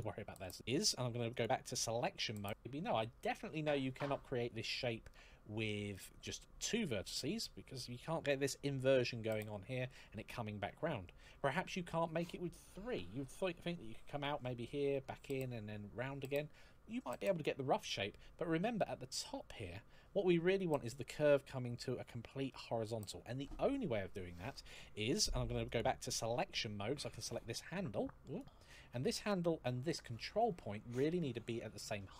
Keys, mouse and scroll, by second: 1.1 click, 4.9 shift+middle click, 18.0 scroll down 1, 18.2-18.8 scroll up 1, 18.9 shift+middle click, 25.4 click, 27.0 right click, 28.1 click, 32.0 click.